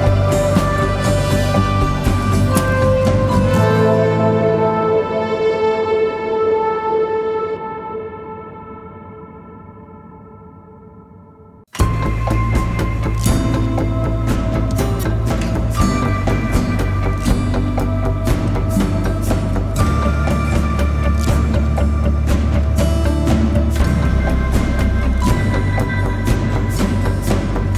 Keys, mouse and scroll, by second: 3.8 ctrl+d, 16.2 ctrl+t, 17.2 alt+shift+click, 20.8 Return, 27.0-27.6 typing.